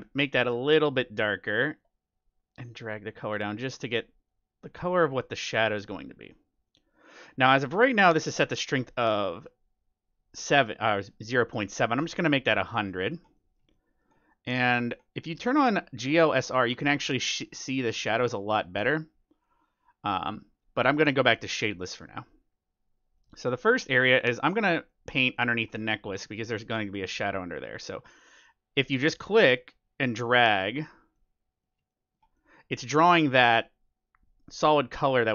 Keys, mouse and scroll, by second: 6.6-8.4 middle drag, 11.6-13.3 drag, 12.4-16.4 middle drag, 16.3-18.0 drag, 17.3-20.4 middle drag, 18.2 click, 21.0-22.8 drag, 21.5-27.0 middle drag, 26.3-28.0 drag, 31.1-34.1 middle drag, 32.9-34.8 drag.